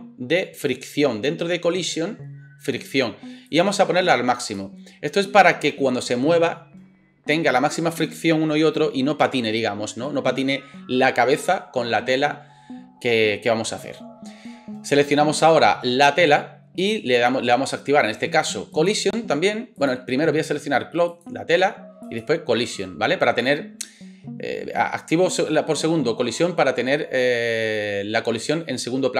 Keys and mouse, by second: 15.9 middle click, 15.9 right click.